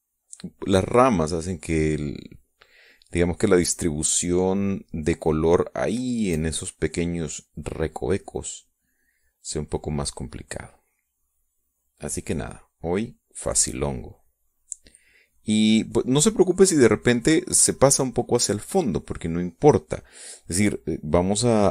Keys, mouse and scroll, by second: 3.7-6.9 drag, 7.9-16.6 drag.